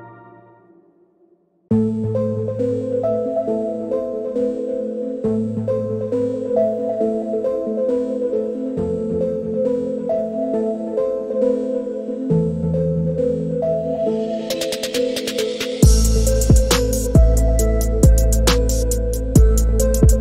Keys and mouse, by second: 1.9-2.9 shift+middle drag, 4.0 z, 12.6 click, 13.9-15.0 drag, 18.0-20.2 drag, 20.1 KP_0.